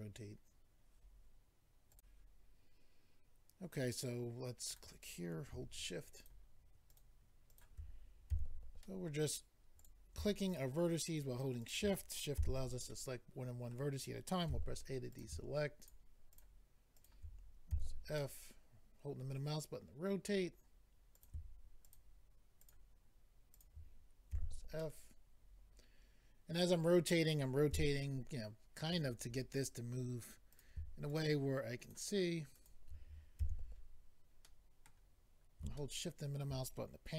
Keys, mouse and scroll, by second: 1.9 click, 4.7 click, 6.2 shift+click, 6.9 shift+click, 7.5 shift+click, 8.3 f, 8.8 middle click, 9.8 click, 10.5 shift+click, 11.2 shift+click, 11.6 shift+click, 12.4 f, 12.9 middle click, 14.5 a, 15.1 click, 16.3 shift+click, 16.9 shift+click, 17.7 f, 18.2 middle click, 21.2 click, 21.9 shift+click, 22.6 shift+click, 23.5 shift+click, 24.3 f, 24.8 middle click, 27.7 a, 30.5 click, 31.1 shift+click, 31.8 shift+click, 32.5 shift+click, 33.4 f, 34.4 middle click, 35.8 shift+middle click.